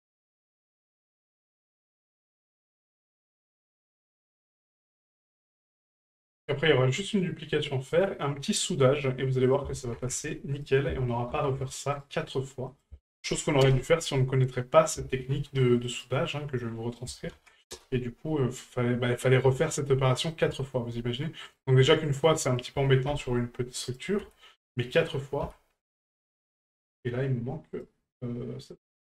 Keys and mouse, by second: 0.7 right click, 2.0 ctrl+click, 5.0-6.0 drag, 7.9 right click, 9.4-10.7 drag, 12.7-13.7 drag, 16.9 ctrl+click, 19.6 shift+middle drag, 20.1 middle click, 20.6 shift+middle click, 21.5 right click, 22.1 shift+right click, 22.5 shift+right click, 23.9 right click, 27.7 right click, 28.7 right click.